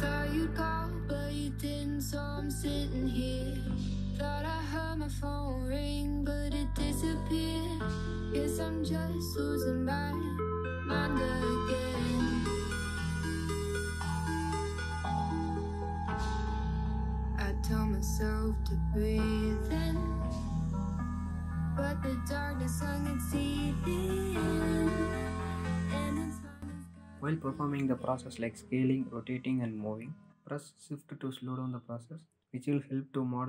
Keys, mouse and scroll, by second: 0.0 x, 0.4 scroll up 1, 0.7 click, 1.9 alt+g, 2.5-3.6 scroll up 2, 3.6 KP_3, 5.5 click, 6.1 click, 6.6 click, 7.6 alt+g, 8.8 KP_7, 10.8 click, 11.2 alt+g, 12.2 click, 12.7 alt+g, 13.2 middle click, 14.0-14.4 scroll up 1, 14.4 click, 14.8-15.5 scroll up 1, 15.5 s, 16.3-16.9 scroll up 1, 16.9 s, 18.6 scroll down 2, 18.9-19.5 middle drag, 19.5 click, 20.1 r, 23.4 KP_7, 24.9-25.8 scroll up 1, 25.8 r.